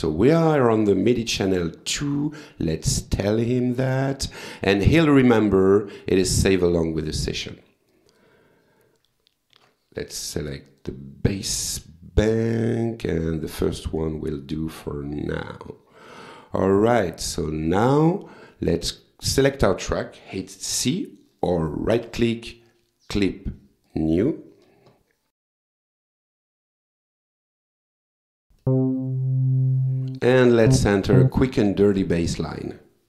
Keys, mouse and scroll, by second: 2.8 click, 3.8 click, 4.8 click, 6.4 click, 7.9 click, 9.6 alt+Tab, 10.7 click, 11.4 click, 13.3 click, 14.5 click, 15.7-17.3 drag, 18.9 click, 21.3 right click, 23.9 click, 25.3 click, 28.6-30.4 drag, 30.7 click, 31.2 click.